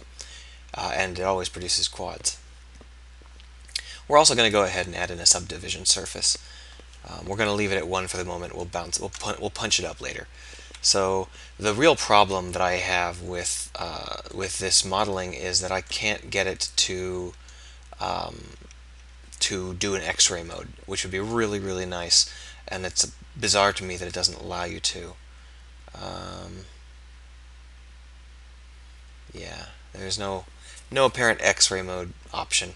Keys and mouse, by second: 18.5 z, 18.9 z, 19.4 z.